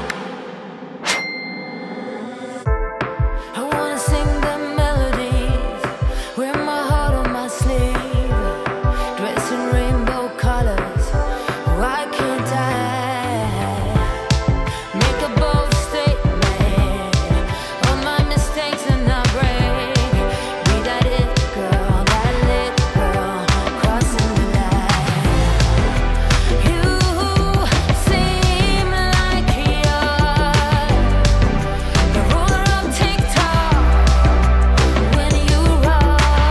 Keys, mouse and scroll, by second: 0.7 alt+click, 1.7-2.9 typing, 3.5-4.3 Return, 5.7 ,, 6.2 Return, 7.0 space, 10.8 space, 11.7 click, 13.7 ctrl+space, 14.5-16.2 typing, 16.6 Down, 16.9 Return, 19.2 click, 20.2-21.0 typing, 21.5 Return, 22.5 click, 23.2-24.8 typing, 25.7 click, 26.3-27.0 typing, 29.6 click, 31.0-33.6 typing, 34.4 Return, 35.9 click, 36.0-36.5 typing.